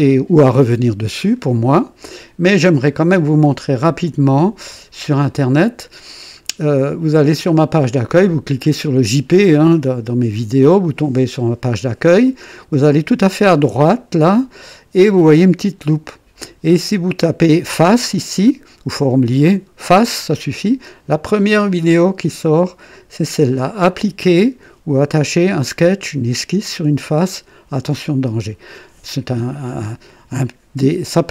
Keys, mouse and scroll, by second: 1.7-2.4 right drag, 4.6 click, 5.9-7.1 scroll down 2, 7.1 scroll up 2.